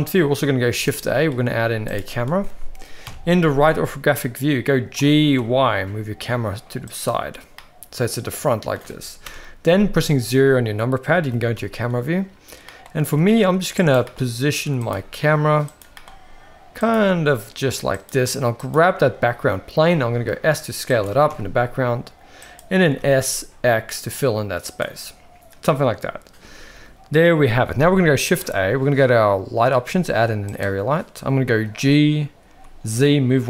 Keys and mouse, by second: 0.7 shift+a, 3.0 KP_3, 5.0 g, 7.5-8.7 middle drag, 9.2 KP_0, 11.2 g, 13.9 g, 14.9 g, 15.9 g, 16.9 g, 18.7 click, 19.8 s, 21.0 g, 22.9 s, 28.3 shift+a, 31.6 g.